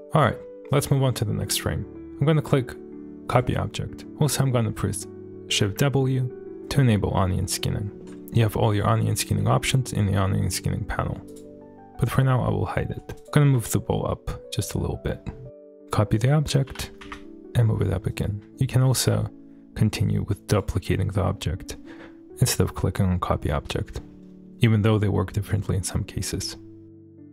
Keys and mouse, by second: 0.7 shift+middle click, 3.3 click, 5.7 shift+w, 6.5-7.3 middle drag, 8.7 click, 11.3 click, 13.2 click, 13.5 g, 13.5 z, 15.8 click, 16.7 g, 17.1 z, 18.2 click, 18.9 shift+d, 26.8-27.3 typing.